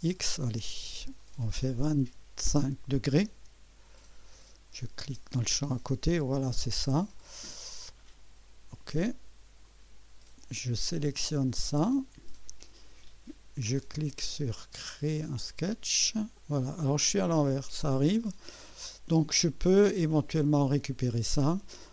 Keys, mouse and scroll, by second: 0.2 click, 1.9 2, 3.3 5, 5.4 click, 6.7-8.4 drag, 9.6 click, 11.9 click, 15.1 click, 20.0 click, 21.3 scroll down 1.